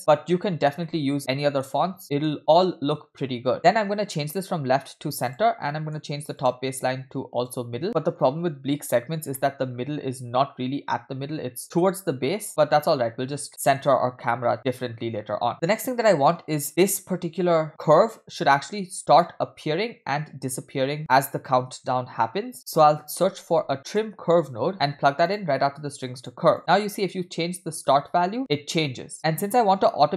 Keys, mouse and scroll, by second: 0.3-0.9 scroll down 3, 0.9-1.2 shift+middle drag, 1.3 middle click, 1.8-2.4 scroll up 3, 2.0 shift+middle click, 3.5 middle click, 3.5-4.2 scroll down 1, 4.2-5.4 drag, 5.7 middle click, 6.4-7.7 drag, 8.0 middle click, 8.3-9.3 scroll up 1, 9.4 shift+middle drag, 9.7-10.5 scroll up 2, 13.5 middle click, 15.3-15.8 scroll down 8, 15.7-16.0 shift+middle drag, 16.3 click, 23.4 shift+a, 27.0-30.1 drag.